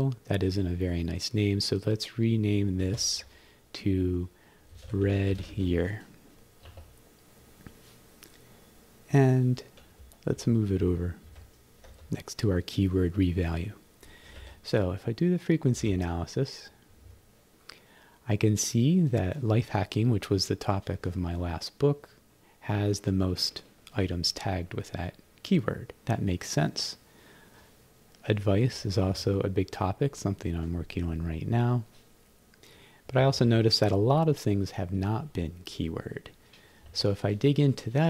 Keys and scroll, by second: 2.9 shift+^, 4.5-6.0 typing, 6.7 Return, 10.3 shift+h, 11.1 shift+h, 14.4 Left, 15.8 shift+f, 16.9 b, 28.7 Down, 33.1 Up, 36.9 Return.